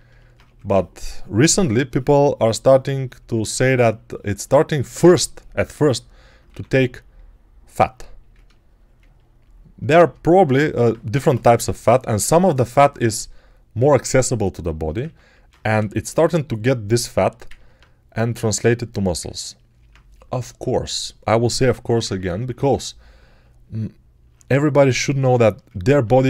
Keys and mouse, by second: 0.2-3.2 drag, 0.3 2, 6.3 1, 11.0 g, 14.0-18.9 alt+drag, 15.6 g, 21.7-22.4 typing.